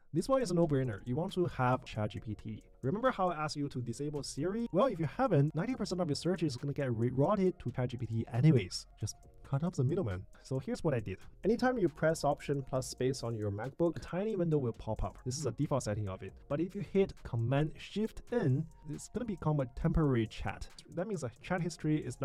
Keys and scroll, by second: 11.5 alt+space, 18.5 shift+super+n, 20.8 BackSpace.